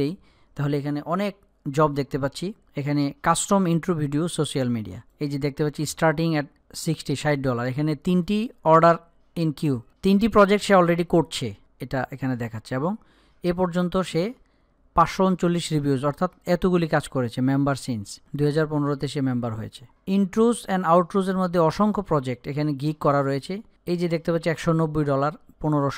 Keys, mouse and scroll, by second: 5.9 click.